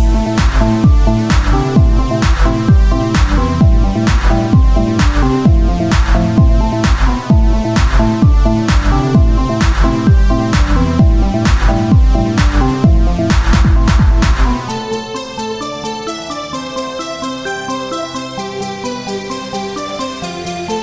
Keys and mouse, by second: 4.3 s, 5.7-8.6 drag, 8.6 z, 9.2 c, 10.6 z, 11.4 shift+d, 16.8 ctrl+KP_1, 18.0 Tab, 18.8-20.0 drag, 20.2 Tab.